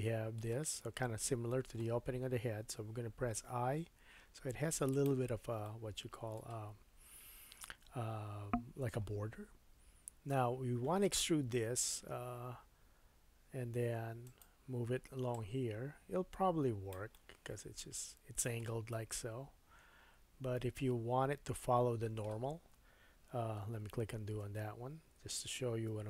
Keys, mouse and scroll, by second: 3.3 i, 5.6-8.6 middle drag, 12.1 e, 15.3-18.9 drag, 17.1 middle click, 18.9 middle click, 21.9 middle click, 23.8 super+z, 24.4 super+z, 25.9 g.